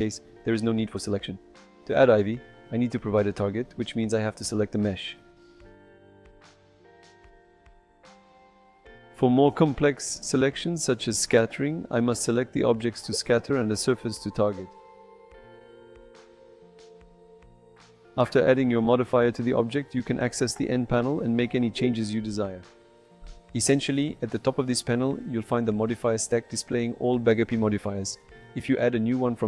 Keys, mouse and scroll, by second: 1.6 shift+a, 3.6 g, 4.0 click, 4.5 right click, 4.8 middle drag, 5.5-5.8 shift+middle drag, 6.5 j, 8.7 shift+middle click, 9.3 shift+right click, 9.5 shift+a, 10.4 Tab, 10.7 s, 11.1 click, 11.2 Tab, 12.0 click, 13.5 click, 15.5 shift+click, 15.7 shift+click, 16.3 j, 19.2 n, 21.7-24.6 shift+drag, 26.0 click, 26.5 j.